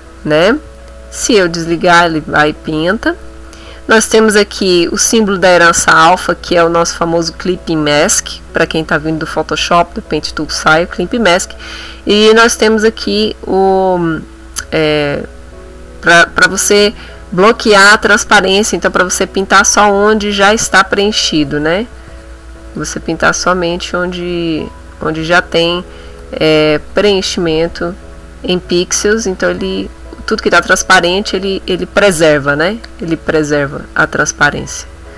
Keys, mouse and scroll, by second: 1.3 click, 2.0 click, 2.7 ctrl+z, 4.1 click, 5.1 click, 12.5 click, 19.4-22.9 drag, 23.5 click, 23.9 click, 25.0 click, 25.5 click, 26.2-35.1 drag.